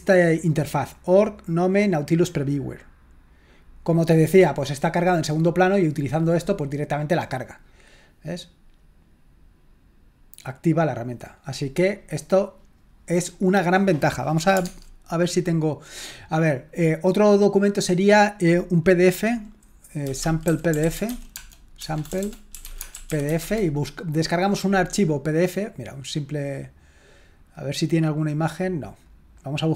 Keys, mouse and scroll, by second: 1.2-2.9 drag, 2.9-3.8 scroll down 2, 11.0-12.7 scroll up 1, 14.7 alt+Tab, 16.7 click, 17.0 click, 19.8-23.5 typing, 25.7 click, 29.3 click.